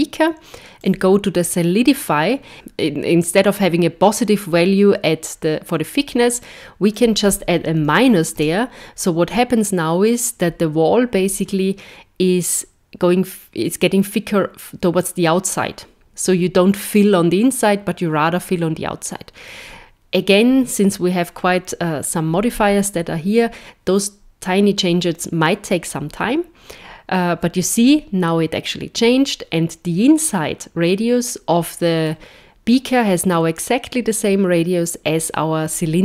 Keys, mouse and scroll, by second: 0.8 click, 5.9 click, 30.9 middle click.